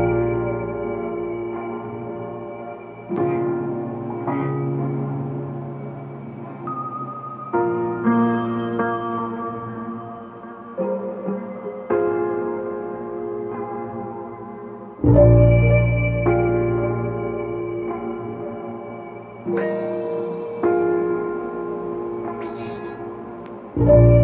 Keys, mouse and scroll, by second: 3.1-6.2 drag, 10.9-11.9 drag, 14.3-16.4 drag, 16.4-17.4 scroll down 3, 17.5-21.8 middle drag, 21.9 g.